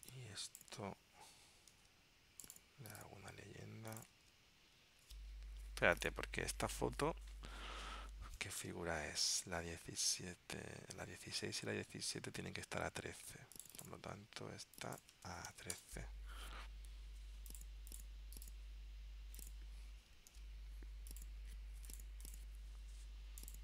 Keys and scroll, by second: 1.8 super+x, 4.9 super+v, 8.7 super+Tab, 9.7 super+Tab, 20.4 super+v.